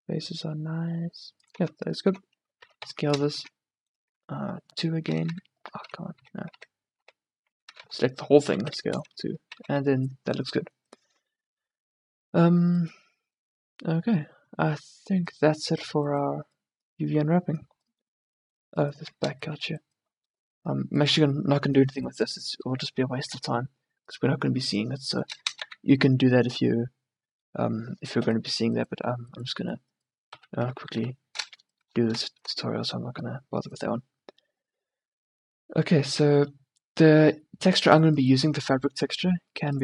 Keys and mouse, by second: 1.7 Tab, 2.3 Tab, 2.6 s, 3.4 Tab, 4.3 Tab, 5.2 a, 5.4 a, 5.9 ctrl+z, 6.2 ctrl+z, 6.6 ctrl+z, 7.1 ctrl+z, 7.7 a, 7.9 a, 8.5 s, 9.1 Tab, 9.7 a, 12.9-15.2 middle drag, 19.1-20.4 middle drag, 25.6 a, 28.4 middle click, 30.4 KP_1, 30.7 KP_3, 31.1 KP_1, 36.2-38.1 drag, 38.1-39.2 middle drag.